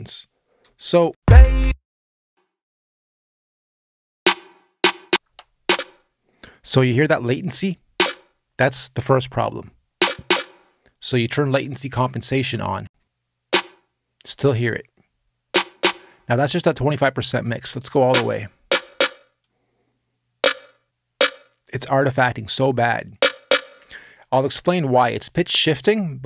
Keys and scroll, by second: 0.9 space, 1.4 s, 5.1 space, 10.9 space, 12.6 space, 23.5 space.